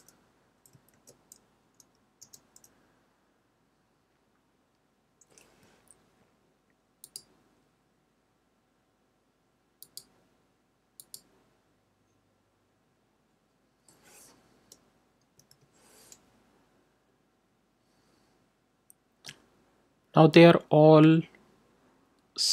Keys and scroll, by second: 0.8 shift+;, 2.2 i, 15.1 BackSpace, 15.4 4.